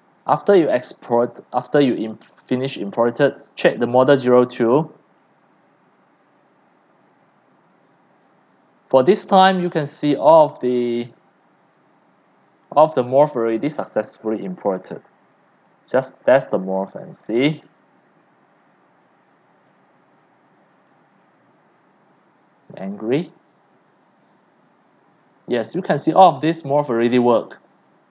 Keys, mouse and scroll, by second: 0.0-1.9 drag, 6.3 click, 9.1-10.6 drag, 10.6-12.0 middle drag, 10.6 scroll, 11.4 scroll, 11.8 click, 12.0-14.7 scroll down 10, 14.7-15.3 scroll up 3, 15.3 scroll down 2, 15.3-19.7 middle drag, 21.3-28.1 alt+drag.